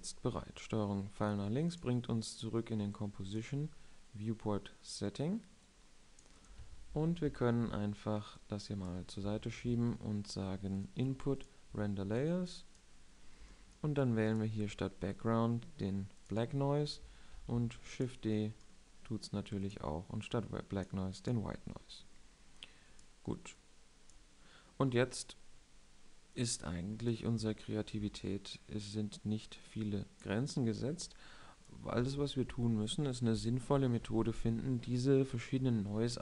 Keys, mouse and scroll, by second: 0.0 ctrl+Left, 7.3 Escape, 10.1 shift+a, 12.4 shift+a, 18.1 shift+d, 18.2 shift+d, 32.8 shift+a.